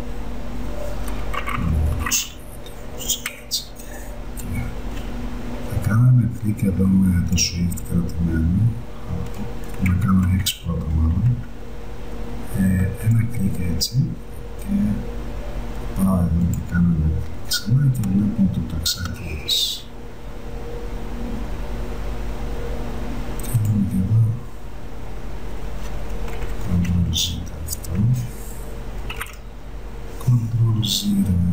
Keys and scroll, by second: 1.5 ], 3.3 [, 10.3 x, 26.4 ctrl+z, 29.3 ctrl+0, 30.0 ctrl+0.